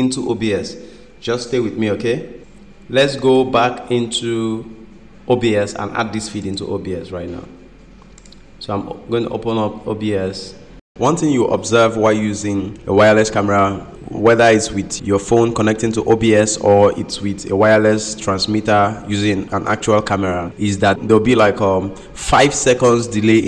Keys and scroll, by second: 2.4 ctrl+m, 10.8 ctrl+m.